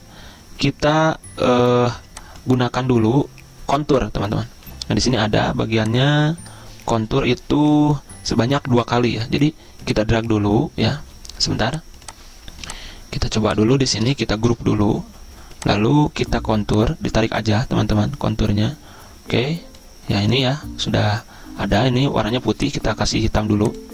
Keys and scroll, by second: 14.7 ctrl+g.